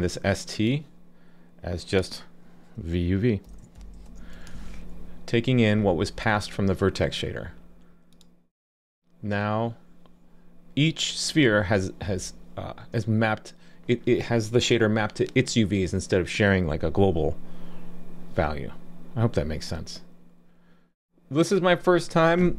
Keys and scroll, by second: 4.6 super+s.